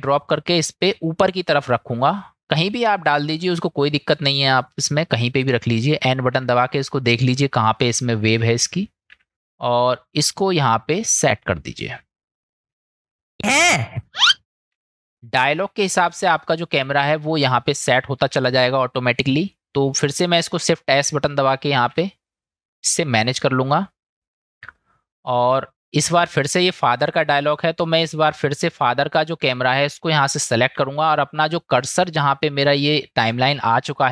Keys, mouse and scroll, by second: 4.2-5.3 drag, 6.4 n, 9.1 n, 10.1-12.4 drag, 13.1 click, 13.4 space, 16.5 click, 20.5 click, 21.9 shift+s, 28.8 click.